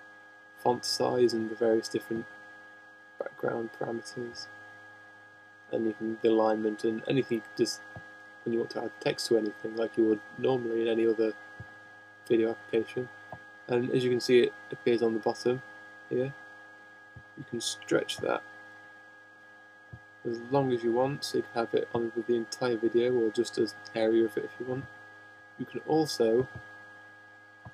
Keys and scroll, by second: 24.5 shift+h.